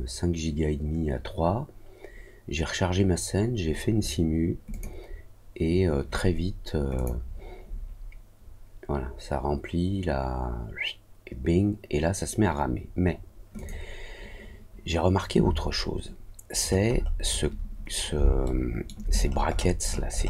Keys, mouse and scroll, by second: 4.6 click, 6.9 click, 13.5 click, 16.5-17.4 scroll down 3, 18.4 alt+middle click, 19.1 scroll down 1, 19.2 scroll up 1, 19.4-20.2 scroll down 9.